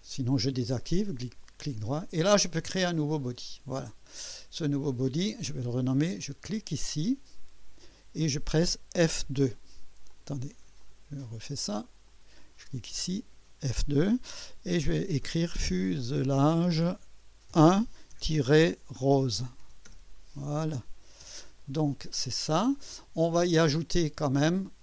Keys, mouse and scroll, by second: 3.1 click, 6.5 click, 9.1 F3, 10.1 click, 10.8 click, 12.0 click, 13.3 F2, 14.9-21.2 typing, 23.8 click, 24.7-24.8 typing.